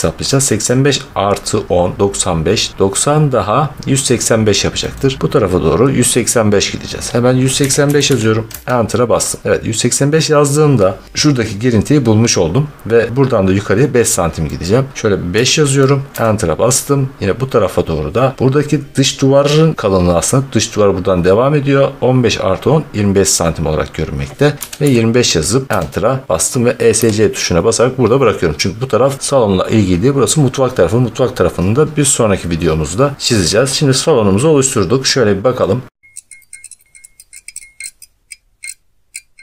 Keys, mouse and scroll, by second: 4.9 middle click, 7.5-8.4 typing, 11.1 scroll, 14.6-14.9 scroll, 15.2-16.0 typing, 24.6 typing, 25.7 Return, 26.8 Escape, 32.9-34.5 scroll, 35.5 scroll.